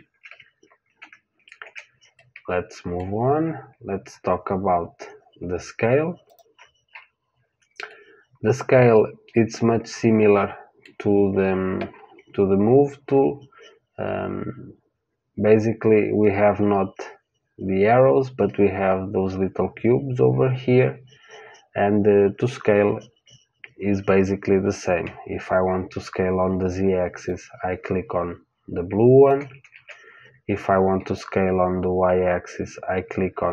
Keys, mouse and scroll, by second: 1.4 ctrl+z, 2.1-4.1 middle drag, 6.2 click, 8.2-9.8 middle drag, 27.2 click, 29.7 ctrl+z, 31.1 click.